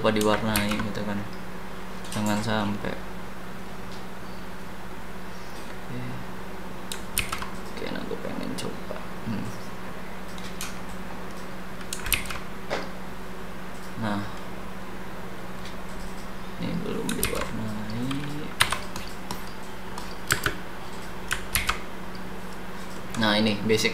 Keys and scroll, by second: 0.5 ctrl+z, 7.2 ctrl+z, 12.1 ctrl+z, 17.2 ctrl+z, 18.6 h, 20.3 space, 21.5 ctrl+z.